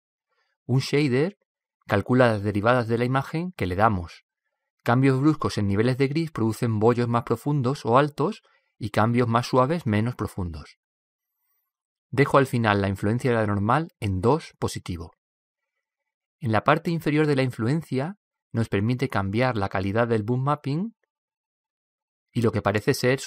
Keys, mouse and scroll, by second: 2.7-3.2 scroll up 1, 3.2-5.1 middle drag, 5.6-8.0 middle drag, 13.0-15.9 drag, 18.4-21.7 drag, 21.8 click.